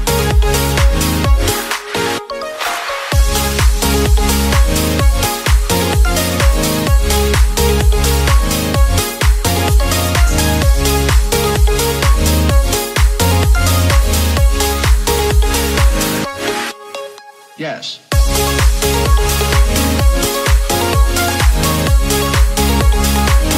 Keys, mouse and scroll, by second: 0.3 click, 0.7-1.3 scroll up 1, 1.3 click, 4.3 middle click, 4.8 Tab, 5.1-6.5 middle drag, 6.5 click, 6.9-8.6 scroll up 1, 9.2 ctrl+r, 12.1 ctrl+r, 14.4-15.6 middle drag, 15.6 ctrl+r, 19.5 click, 20.2 click, 20.6 shift+click, 21.0 shift+click, 21.5 shift+click, 21.9 middle click, 22.1 scroll up 2, 22.6 middle click, 23.2 e.